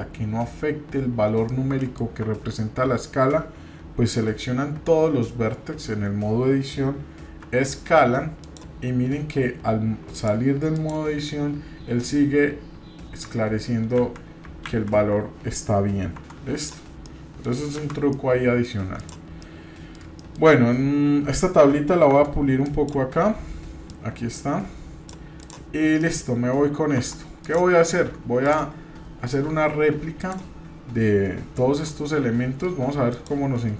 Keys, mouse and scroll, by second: 1.4 middle click, 2.2 Tab, 4.2-10.1 middle drag, 10.1 click, 14.1 ctrl+z, 14.6 ctrl+z, 16.1 Tab, 16.6 click, 17.0 middle click, 17.8 shift+z, 18.1 middle click, 19.0 click, 19.4 middle click, 20.2 shift+middle click, 20.5 scroll up 1, 22.1 Tab, 22.6 click, 23.8-25.1 drag, 25.4 click, 25.7 scroll down 2, 26.0 middle click, 26.3 scroll up 1, 27.0 Tab, 27.4 click, 28.4 click, 30.2 click, 31.7 Tab, 32.7 Tab, 33.1 click.